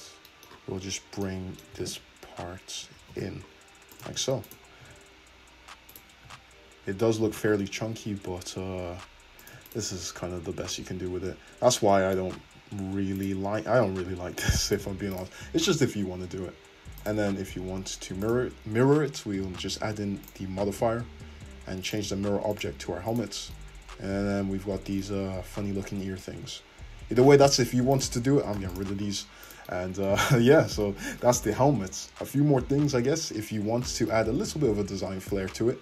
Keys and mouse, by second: 1.2-4.5 middle drag, 1.8 g, 4.1 Tab, 4.5-6.0 drag, 4.8 `, 6.0-9.8 middle drag, 6.3 `, 7.3 r, 9.8 click, 9.8-13.2 middle drag, 9.9 `, 12.3 `, 13.2 click, 13.3-15.2 middle drag, 14.0 r, 15.2-17.1 drag, 17.1-18.3 middle drag, 18.3-22.1 drag, 22.1-23.2 middle drag, 23.2 click, 23.2-28.0 middle drag, 25.2 `, 28.0 click, 28.1 middle click, 28.6 x, 29.5 click, 30.2 `, 32.2 `, 34.7 `, 35.3 middle click.